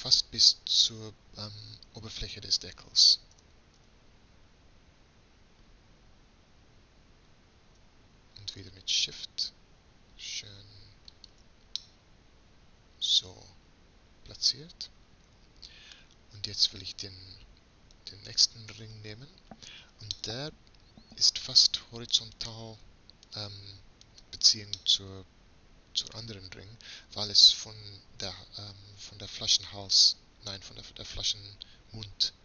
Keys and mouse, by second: 3.3 g, 11.8 click, 12.6 middle click, 13.1 click, 13.7 middle click, 14.9-17.0 middle drag, 17.0-18.7 drag, 18.7-20.5 right drag, 20.5 middle click, 22.4-25.6 middle drag.